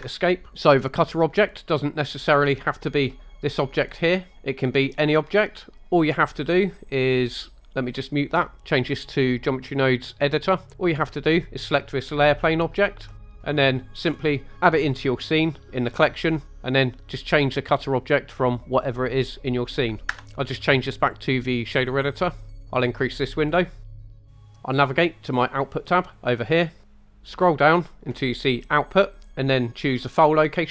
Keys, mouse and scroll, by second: 0.5 scroll down 1, 0.5 KP_0, 2.6-4.3 drag, 6.5 click, 8.7-10.4 drag, 12.0 click, 13.2 middle click, 14.1 scroll up 2, 17.3-20.2 drag, 21.0-22.2 drag, 22.5 scroll down 3, 22.6 click, 23.8 scroll up 1, 23.9 shift+middle drag, 26.1 click, 27.0 scroll down 1, 30.4 click.